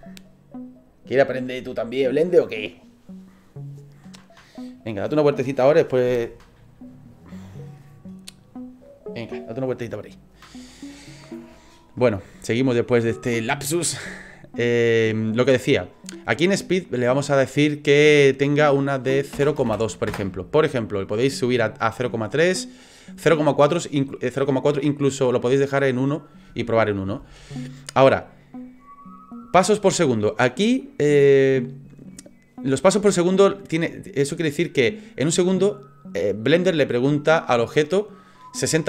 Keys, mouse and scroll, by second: 17.5 click.